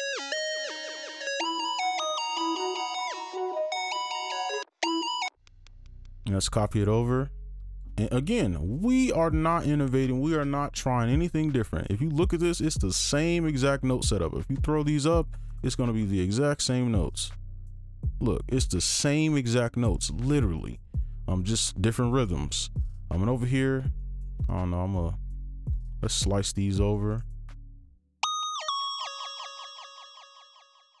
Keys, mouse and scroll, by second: 0.6 right click, 1.4 space, 1.9 click, 2.2 scroll down 1, 2.5 right click, 4.6 space, 4.8 space, 5.2 space, 5.8 ctrl+a, 6.6 shift+click, 8.0 right click, 11.6-13.6 scroll down 1, 14.1 ctrl+click, 15.0 ctrl+Up, 16.2 right click, 19.6-20.9 scroll up 1, 20.9 right click, 24.0 right click, 24.5 ctrl+click, 25.7 alt+click, 27.1 right click, 28.6 double click, 29.9 double click, 30.0 right click.